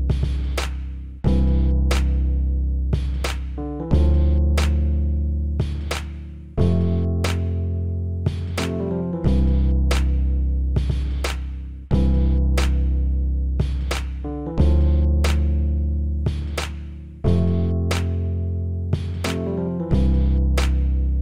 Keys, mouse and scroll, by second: 2.8-4.5 right drag.